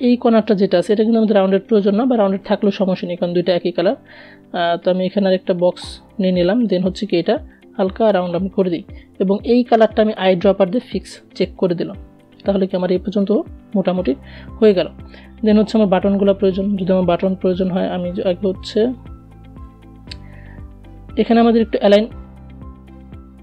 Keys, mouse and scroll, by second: 1.7-8.3 drag, 8.3 i, 9.1 click, 15.0 click, 18.0-23.4 drag.